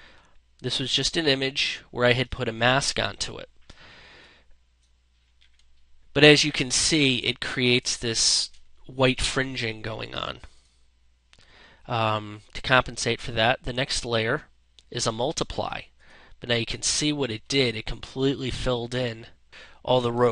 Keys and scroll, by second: 3.1 ctrl+space, 6.8 space, 16.8 space, 19.7 space.